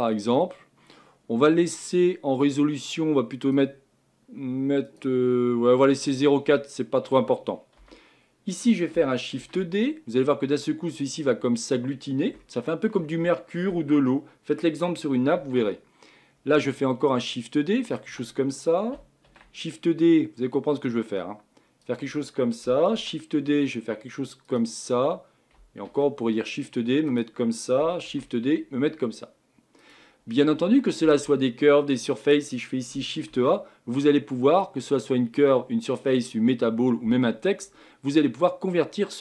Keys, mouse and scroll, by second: 0.0-0.9 scroll down 7, 1.8 click, 3.4-5.0 drag, 6.4-7.8 middle drag, 7.8 KP_1, 9.4 shift+d, 12.0-12.4 scroll down 3, 12.4-15.4 shift+middle drag, 15.4 shift+d, 19.3 shift+d, 22.9 shift+d, 25.9 shift+d, 33.3 shift+a.